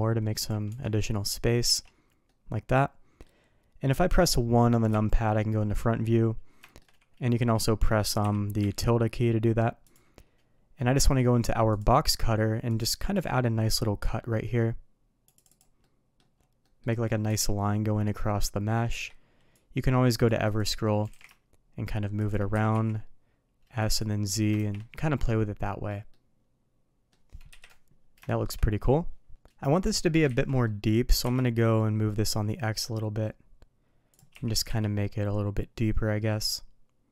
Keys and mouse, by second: 0.6 Tab, 1.6 alt+a, 2.2-3.2 middle drag, 4.8 KP_1, 6.6 shift+middle click, 8.2 KP_3, 8.5 `, 14.0-15.5 drag, 15.8-16.1 middle drag, 16.6 middle drag, 17.2 KP_3, 18.9 q, 21.0 g, 22.5 s, 24.5 shift+2, 24.9-25.8 middle drag, 26.0-27.0 middle drag, 27.4 KP_3, 28.2 shift+middle drag, 29.3 middle click, 29.8 middle click, 30.2 ctrl+z, 30.6 middle click, 31.0 g, 34.3 shift+2, 34.6 KP_3, 35.5-37.1 middle drag.